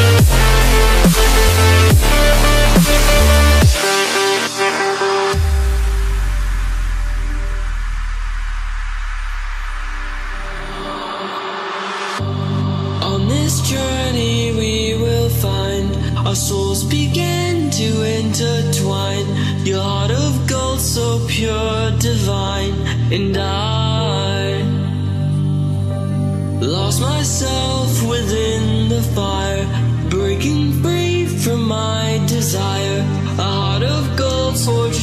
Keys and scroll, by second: 16.4 ctrl+v.